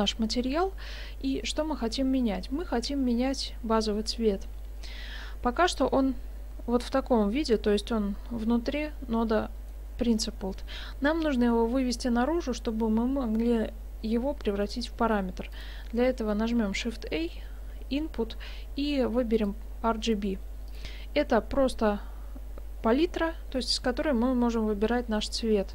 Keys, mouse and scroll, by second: 5.7 click, 9.7 middle click, 15.5 click, 16.7 shift+a.